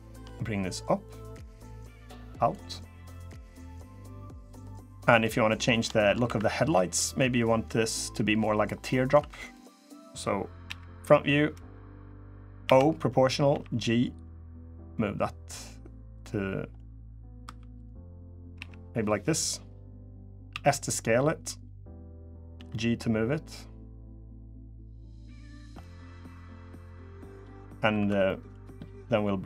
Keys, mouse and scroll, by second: 0.5 click, 1.7 click, 3.8 click, 4.2 middle click, 5.2 middle click, 5.7 shift+middle click, 5.8 shift+middle click, 6.0 2, 6.4 click, 7.1 middle click, 8.2 middle click, 8.9 2, 9.2 click, 10.4 KP_1, 12.4 o, 13.3 g, 16.5 middle click, 17.2 3, 17.5 click, 18.3 KP_1, 19.8-20.2 scroll up 2, 20.3 s, 22.3 g, 25.5 middle click, 26.0-26.8 scroll down 5, 27.1 middle click, 27.4 scroll up 2, 27.6 2, 28.0 middle click, 29.2 click.